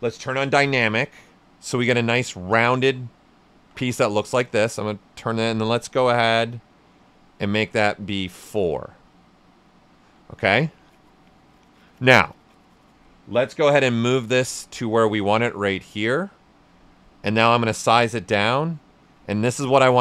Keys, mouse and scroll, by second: 0.6 d, 1.9 right click, 3.5 shift+f, 5.5-7.7 drag, 7.7 right click, 9.9 shift+f, 13.6 w, 13.8 right click, 14.4-19.2 drag.